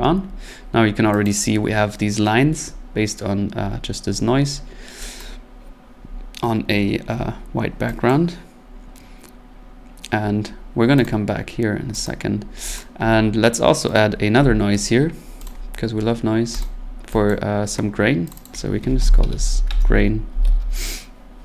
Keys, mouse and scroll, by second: 1.2 click, 2.3-3.5 scroll, 3.5-3.9 scroll, 4.5-4.8 scroll, 5.2 click, 6.0-6.6 scroll, 7.2 scroll, 8.1 click, 11.0 click, 12.0 click, 12.4 scroll, 12.8 click, 13.9 right click, 14.4 n, 15.5 click, 16.6 click, 17.3 click, 18.3 click, 18.3-20.9 typing, 18.4 click.